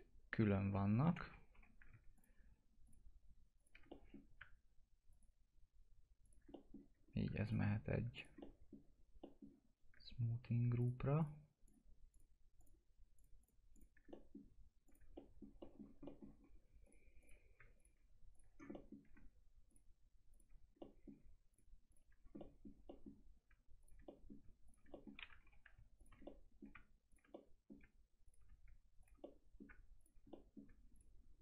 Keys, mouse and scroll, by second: 0.9-1.5 scroll up 1, 1.5 F4, 2.1 ctrl+click, 3.8 middle click, 3.9 middle click, 5.1 ctrl+click, 6.5 middle click, 7.0 scroll up 1, 7.4 ctrl+click, 8.1 ctrl+click, 8.4 middle click, 10.8 ctrl+click, 14.1 middle click, 14.8 ctrl+click, 15.1 alt+middle click, 15.5 alt+middle click, 15.6 middle click, 15.8 scroll down 1, 16.0 middle click, 16.4 scroll up 1, 16.8 ctrl+click, 17.7 ctrl+click, 18.5 scroll down 1, 18.7 middle click, 19.1-19.6 ctrl+scroll up 1, 19.6 ctrl+click, 20.8 middle click, 21.5 ctrl+click, 22.1 scroll down 1, 22.3 middle click, 23.8 ctrl+click, 24.0 middle click, 24.6 ctrl+click, 24.9 middle click, 25.0-25.4 scroll down 1, 25.4 F2, 25.9 ctrl+click, 26.2 middle click, 27.1 ctrl+click, 27.3 middle click, 28.2 ctrl+click, 29.0 ctrl+click, 29.2 middle click, 29.9 ctrl+click, 30.3 middle click, 30.9 ctrl+click.